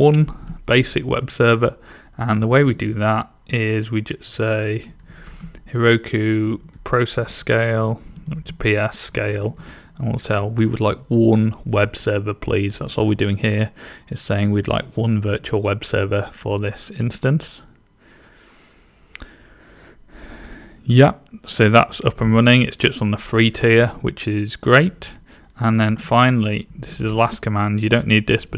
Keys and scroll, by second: 2.1-3.2 typing, 4.4-10.8 typing, 25.3-28.5 typing.